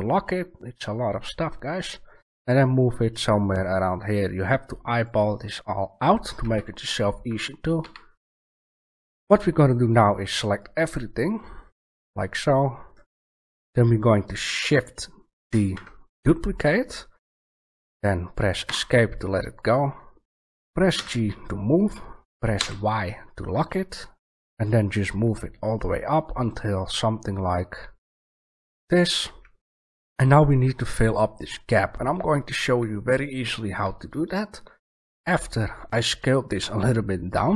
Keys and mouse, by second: 5.1 click, 6.4 a, 7.8 b, 15.4 shift+d, 20.9 g, 28.7 click.